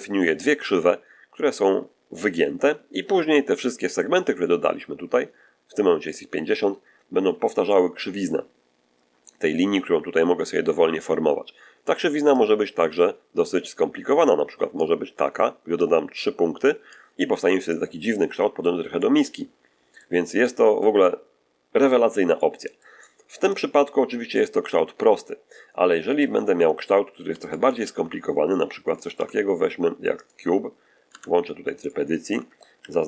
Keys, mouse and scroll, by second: 12.3-14.9 drag, 15.7-17.0 drag, 17.6-18.7 middle drag, 18.9-20.1 middle drag, 20.3-22.0 middle drag, 22.3-23.4 shift+middle drag, 24.6 scroll down 2, 26.1 Tab, 27.2 x, 27.3 shift+click, 27.7 shift+a, 30.1 click, 31.0 Tab, 31.4 shift+middle click, 31.4 scroll down 3, 31.7 shift+middle click, 32.7 shift+3.